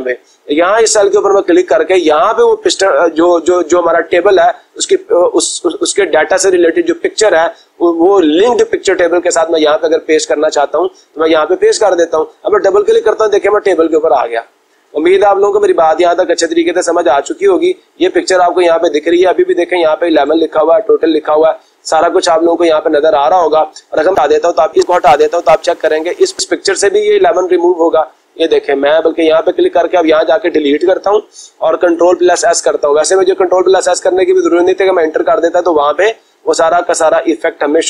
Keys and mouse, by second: 0.6 click, 2.4 click, 10.6 click, 12.3 click, 12.6 click, 25.4 click, 26.8 click, 28.7 click, 29.5 click, 30.6 Delete, 32.1 ctrl+s.